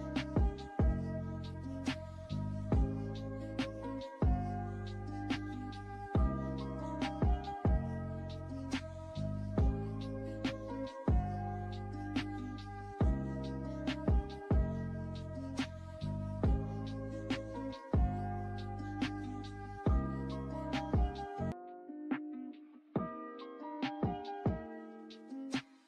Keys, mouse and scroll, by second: 15.4 click.